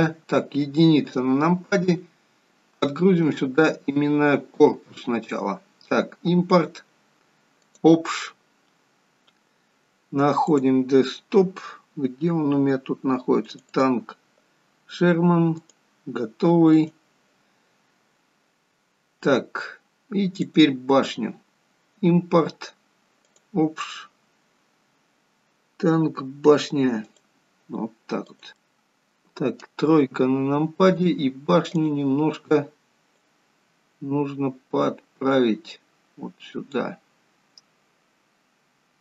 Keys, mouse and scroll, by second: 0.9 KP_1, 3.0 click, 10.4 click, 20.4 click, 28.5 middle click, 29.9 KP_3, 31.6 click, 33.1 click.